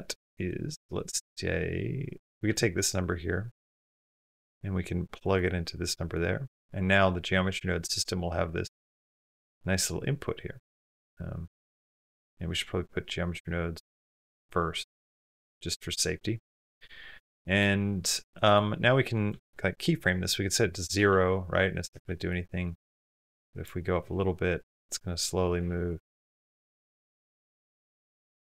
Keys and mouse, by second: 0.2 click, 0.8 click, 2.2-5.2 drag, 5.8 click, 6.3 click, 10.8 click, 11.6 click, 11.9 click, 14.1-15.1 drag, 15.4-17.3 typing, 17.3 click, 18.3-19.4 drag, 21.3 space, 21.9 space, 22.3-23.4 drag, 24.1 space, 25.5 space, 25.7 click, 26.8 space.